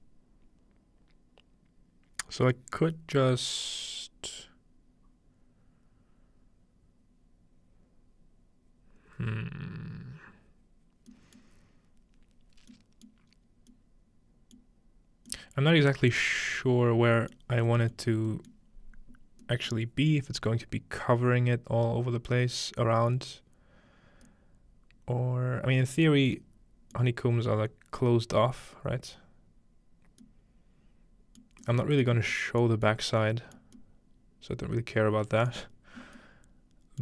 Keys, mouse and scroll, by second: 3.0-8.3 middle drag, 11.4-12.7 middle drag, 13.3 middle click, 13.3-13.8 scroll up 1, 14.7-15.3 middle drag, 18.0 middle click, 19.0-19.4 middle drag, 27.0-29.7 middle drag, 32.1 middle click, 35.5-36.4 middle drag, 35.9 scroll down 2.